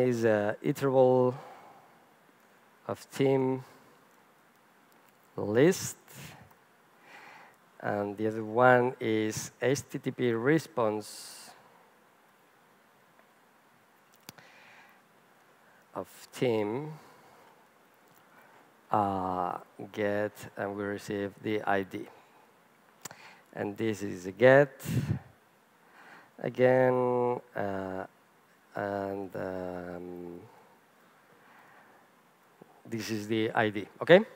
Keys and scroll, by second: 1.4 Return, 2.2 Return, 3.6 Return, 14.1 Return, 25.0 Return.